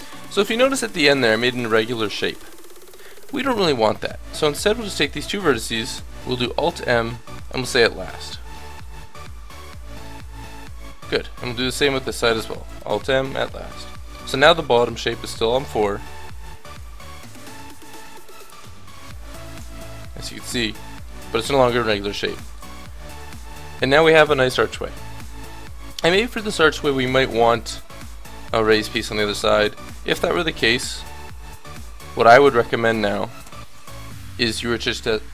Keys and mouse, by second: 5.9 alt+m, 11.7-12.8 middle drag, 12.8 alt+m, 18.6 g, 20.4 ctrl+z, 22.0 a, 23.1 Tab, 30.9-32.2 middle drag, 33.4 KP_7, 33.7 Tab.